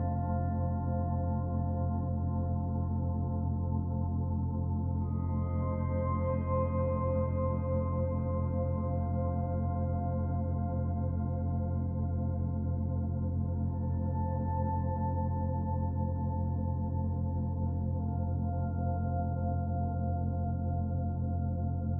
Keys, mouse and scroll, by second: 11.1 middle click, 12.0-12.8 scroll up 1, 13.3-14.1 scroll up 3, 14.6 middle click, 17.6 shift+a, 21.0-21.6 scroll down 1, 21.6 middle click, 21.6-21.9 scroll down 3.